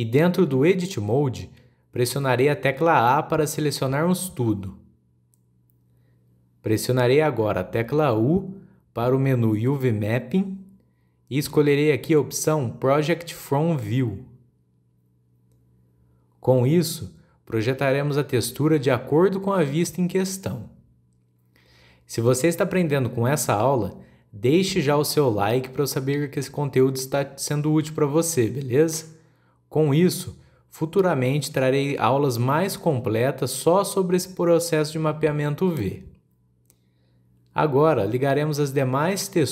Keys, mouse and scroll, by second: 1.1-3.2 scroll down 1, 3.2-4.0 scroll down 1, 5.1 a, 8.7 u, 19.3-20.2 middle drag, 20.2-20.6 scroll up 2, 20.6-22.3 middle drag, 22.3-22.9 scroll down 3, 22.9-24.3 middle drag, 24.3-27.5 drag.